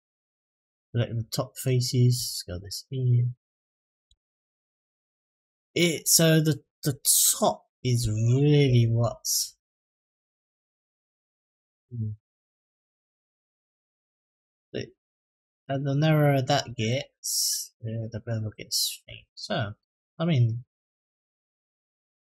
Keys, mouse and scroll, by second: 1.0 middle click, 1.9 s, 3.8 Tab, 4.3 click, 4.7 middle click, 8.4 ctrl+z, 8.8 ctrl+z, 9.1 ctrl+z, 10.8 middle click, 12.0 Tab, 12.6-13.2 middle drag, 13.5-14.4 scroll up 4, 14.4-14.9 middle drag, 15.2-15.7 middle drag, 16.0-16.4 shift+middle drag, 16.6-17.1 middle drag, 18.8 Tab, 19.3 middle click, 21.0 s.